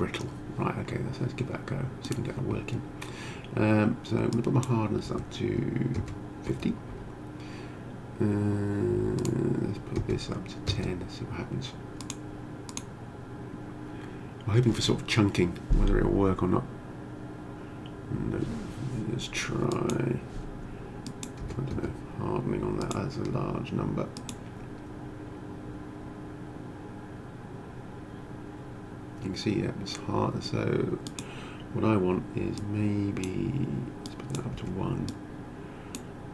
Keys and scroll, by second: 5.0 5, 6.0 0, 6.4 Return, 10.0 0, 10.7 Return, 21.4 0, 21.7 Return, 34.5 1.